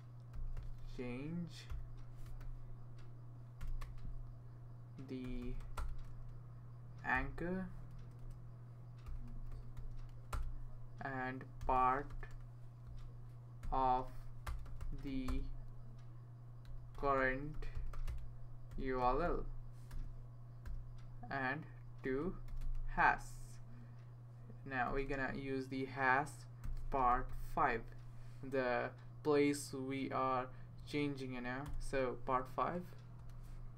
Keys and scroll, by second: 0.1-22.7 typing, 24.6-25.4 typing, 26.5-27.8 typing, 31.7 Return, 33.2 space.